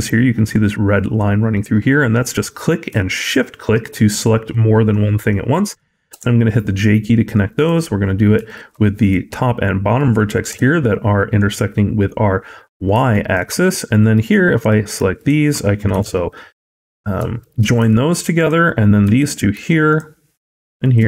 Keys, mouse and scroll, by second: 2.0 click, 3.1 shift+click, 6.0 j, 7.5 click, 8.3 shift+click, 10.4 j, 13.0 shift+middle click, 13.4 middle click, 14.5 click, 15.0 shift+click, 15.8 j, 16.6 click, 17.2 shift+click, 17.7 j, 18.2 click, 19.0 shift+click, 19.4 j, 19.7 click, 20.6 shift+click, 21.0 j.